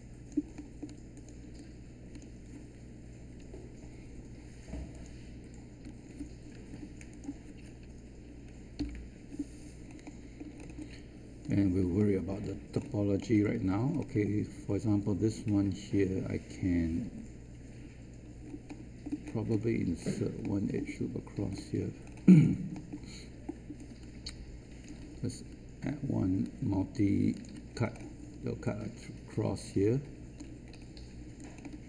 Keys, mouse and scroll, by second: 0.5 alt+middle click, 1.1 click, 1.9 alt+click, 3.4 Delete, 4.9 click, 5.8 Delete, 6.4-7.0 scroll down 1, 7.1 click, 8.7 Delete, 9.8 alt+scroll down 1, 10.5-10.8 scroll up 1, 10.8 alt+click, 11.9 alt+middle click, 12.7 scroll up 1, 13.9 alt+middle click, 18.4-18.8 scroll down 1, 18.8 alt+middle click, 19.2-19.6 scroll down 1, 19.9-20.2 scroll up 1, 20.4 alt+middle click, 21.5 alt+middle click, 22.0 scroll up 1, 22.7 alt+middle click, 24.2 shift+right click, 27.2 ctrl+click, 27.7 scroll down 1, 28.6-30.3 alt+drag, 30.6 scroll up 1, 31.3 alt+click, 31.6 alt+middle click.